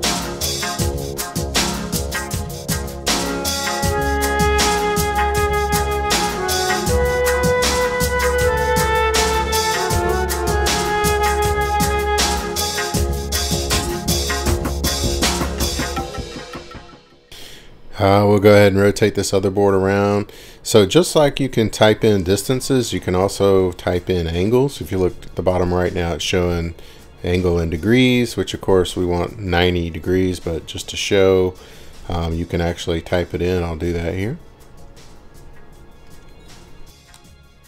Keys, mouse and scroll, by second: 0.6 scroll down 3, 0.6 w, 0.9-1.3 scroll up 2, 1.3 Escape, 1.7 scroll, 1.7 q, 3.1 click, 5.3 click, 6.3 Escape, 8.3 Escape, 10.8 click, 11.7 click, 13.2 click, 15.0 click, 16.3 click, 20.4 scroll, 25.5 middle click, 35.8-36.6 typing, 37.1 Return.